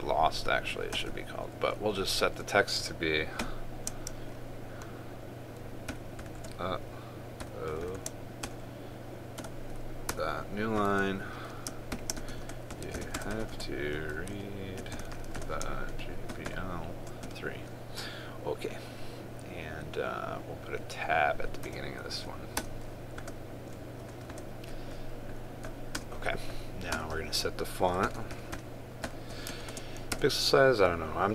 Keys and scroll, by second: 30.3 ctrl+space.